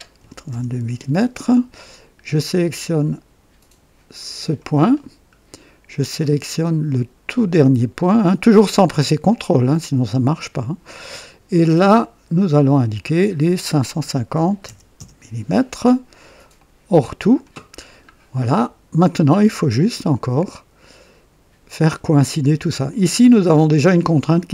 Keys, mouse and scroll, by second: 0.2 KP_2, 0.5 KP_Enter, 4.3 click, 4.9-5.2 scroll down 2, 8.8 click, 12.3 click, 14.1 KP_5, 14.5 KP_5, 14.6 KP_0, 14.9 KP_Enter, 16.5-17.6 drag, 17.7 typing, 17.8-18.1 scroll up 1, 18.4-19.2 right drag, 20.2-22.8 drag, 23.2-23.6 scroll up 1.